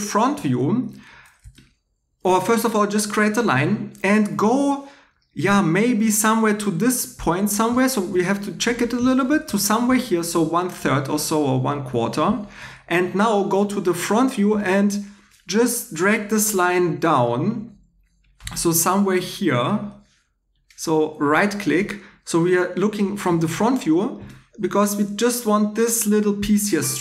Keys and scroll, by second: 23.3 2.